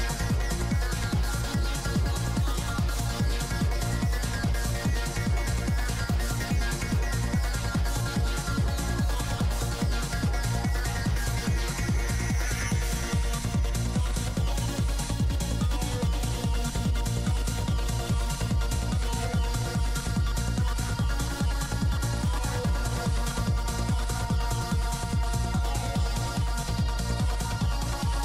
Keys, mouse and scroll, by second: 0.0 p, 0.2 f, 0.3 middle click, 0.6 f, 0.9 click, 2.1 middle click, 2.7 shift+c, 2.8 shift+f, 3.3-5.2 middle drag, 5.2 click, 5.6 middle click, 6.1-7.9 drag, 7.9 middle click, 8.9-10.0 drag, 10.0-11.7 middle drag, 10.5 f, 11.1-12.5 drag, 12.5-13.9 middle drag, 13.9-15.4 drag, 15.8 f, 16.3-17.9 drag, 18.3 f, 19.1 click, 19.9-22.5 middle drag, 23.2-24.8 middle drag, 24.3 f, 24.6 f, 25.2 click, 26.9 middle click, 27.6-28.2 drag.